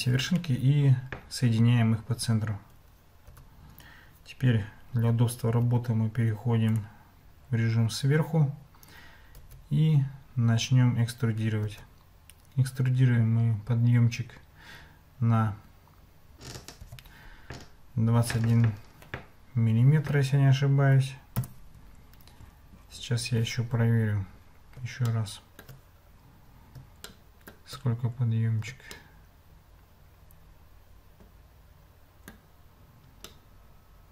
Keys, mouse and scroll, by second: 3.3 Tab, 4.9 Escape, 5.6 `, 9.4 Tab, 11.7 e, 25.1 shift+middle click, 25.4 shift+click, 27.2 shift+click, 29.1-32.3 shift+drag, 33.3-34.1 shift+drag.